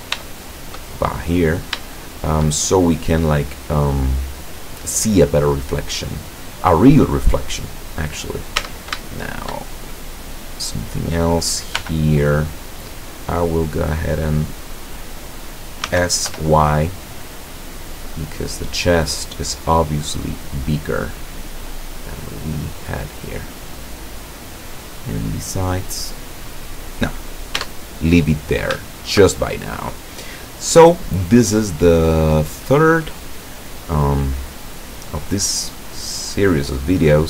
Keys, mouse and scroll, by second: 0.3-0.9 shift+middle drag, 2.0-2.6 shift+middle drag, 3.0-5.2 middle drag, 6.0 right click, 7.2 middle click, 7.5-8.0 middle drag, 8.1-8.8 middle drag, 8.7 Tab, 9.2 shift+middle click, 10.6 shift+middle click, 10.7 shift+right click, 11.9 l, 12.5-14.2 middle drag, 14.2-15.9 scroll up 1, 15.9-17.0 scroll up 1, 15.9 s, 16.4 y, 17.0-19.3 scroll up 1, 20.2 click, 21.2-22.2 middle drag, 23.2 click, 24.3-27.2 middle drag, 27.7 Tab, 27.7 middle click, 28.1-28.9 middle drag, 29.5-30.5 shift+middle drag.